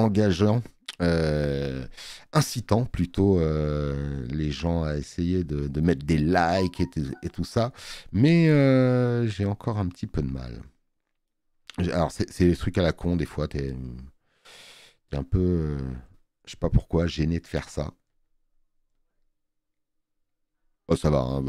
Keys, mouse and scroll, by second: 20.9 space, 21.0 click.